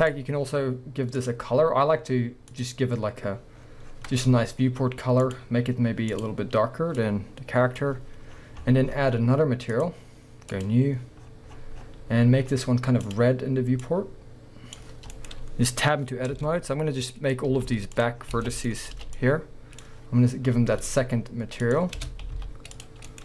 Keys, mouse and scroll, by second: 0.0 click, 1.2 click, 2.5-6.3 drag, 3.6-5.2 scroll down 2, 5.5-6.1 scroll down 1, 8.3-9.8 middle drag, 8.3-9.8 scroll up 2, 9.8-13.1 drag, 11.2-13.0 scroll down 2, 15.1 middle click, 15.3 scroll up 2, 16.1 middle click, 16.1 scroll up 1, 16.4 b, 17.5-18.7 middle drag, 18.2 scroll down 2, 18.3 a, 20.2-21.6 scroll up 2, 22.0 Tab, 22.0-23.1 drag, 22.3 z, 23.1-23.2 middle drag.